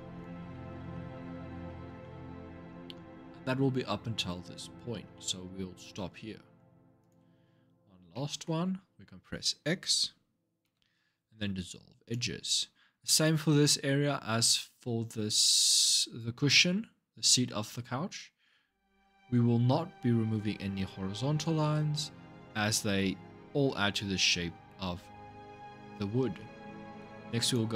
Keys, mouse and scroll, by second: 0.3-2.3 middle drag, 2.3-2.7 scroll up 2, 3.0-5.6 scroll up 1, 6.8 alt+shift+click, 7.9 shift+middle click, 8.3-10.4 scroll down 3, 10.4 x, 27.2 click.